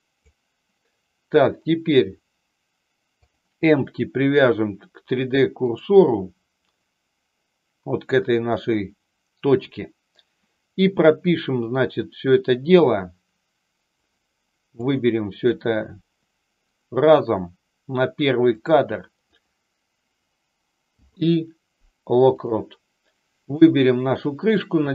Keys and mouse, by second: 3.1-5.7 drag, 13.9 click, 18.6 click, 23.5 click.